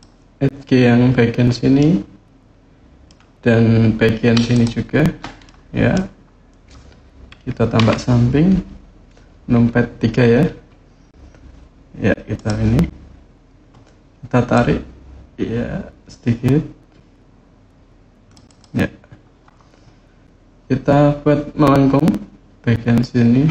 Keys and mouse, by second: 1.5-2.8 middle drag, 4.3 shift+click, 5.2 middle click, 7.6 KP_3, 12.1 click, 14.3-18.1 drag, 18.3-23.5 drag.